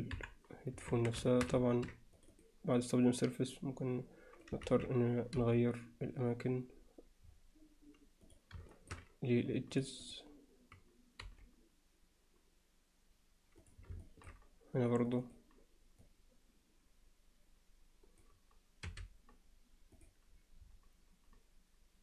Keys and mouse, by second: 0.1 KP_1, 0.9 Tab, 1.3 shift+middle click, 2.3 click, 3.3-4.5 drag, 4.7 ctrl+z, 5.4 g, 8.7 alt+shift+middle click, 9.7 click, 10.1 click, 11.2 g, 14.1 alt+shift+middle click, 15.2 click, 16.2-18.3 drag.